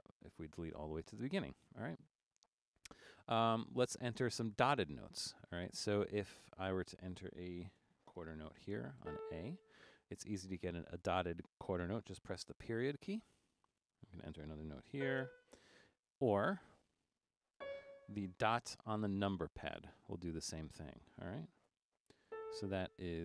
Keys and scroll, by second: 7.8 typing, 9.0 typing, 12.9-15.0 typing, 16.3 typing, 17.6 typing, 19.8 ., 21.7-22.8 typing.